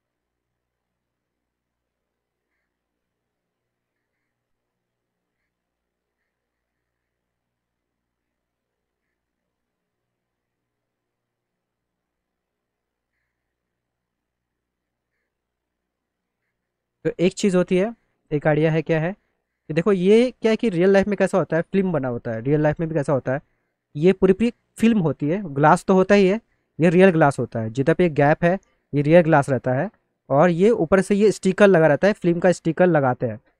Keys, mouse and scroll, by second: 2.8 middle click, 4.5 click, 5.5 alt+middle click, 7.3 click, 8.4 alt+middle click, 9.5 click, 10.6 alt+middle click, 13.4 middle click, 13.7 middle click, 14.0 middle click, 14.3 middle click, 14.8 middle click, 15.3 middle click, 16.0 middle click, 16.8-17.8 alt+middle drag, 19.0 middle click, 19.3 middle click, 29.9 middle click, 30.2 middle click, 30.5 middle click.